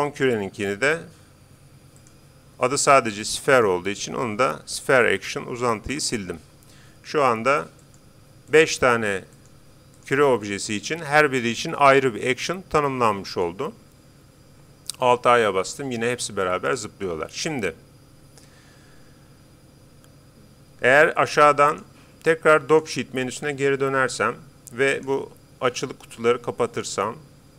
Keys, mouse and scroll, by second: 0.1-1.8 right drag, 2.0-3.7 drag, 4.8 BackSpace, 5.2 BackSpace, 7.8-12.2 right drag, 13.3-15.0 right drag, 15.4 alt+a, 18.3 Escape, 21.7-23.3 drag, 24.9-26.6 drag, 26.7-27.5 drag.